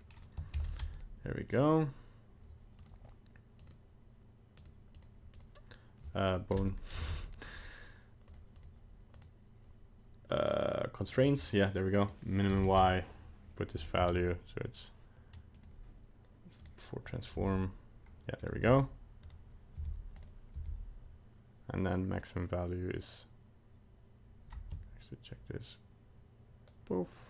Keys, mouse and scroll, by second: 2.8 click, 3.6 click, 4.6 click, 4.9 click, 5.3 click, 6.6 right click, 7.0 ctrl+Tab, 7.3 right click, 8.3 click, 8.6 click, 9.1 click, 11.1 click, 12.1 click, 12.6 ctrl+v, 14.0 g, 16.7 click, 17.3 g, 18.7 g, 19.8 g, 20.5 g.